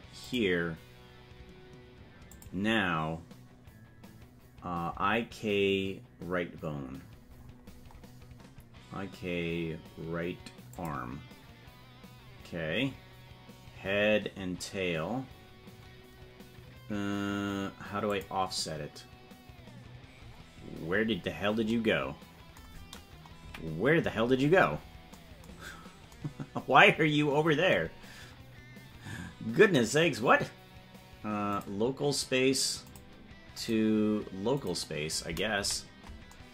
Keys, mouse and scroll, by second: 2.2-11.4 drag, 18.1 click, 20.6-21.7 scroll down 10, 23.3 KP_Decimal, 24.2 scroll down 1, 25.1-25.7 scroll down 10, 31.5-32.9 drag, 33.5-34.6 drag, 35.5 KP_Decimal.